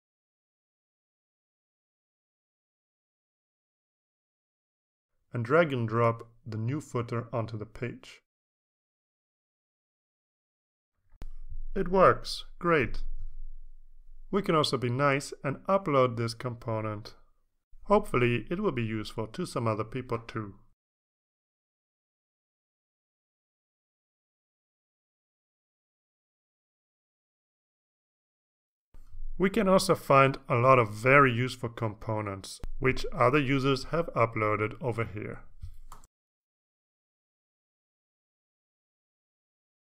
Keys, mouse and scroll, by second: 0.0-2.7 typing, 3.5 click, 8.7 click, 9.3-10.7 drag, 22.0 click, 22.7 right click, 24.3 click, 25.3 click, 26.2 click, 27.5 click, 33.7 click, 35.4 click, 35.7-37.6 typing.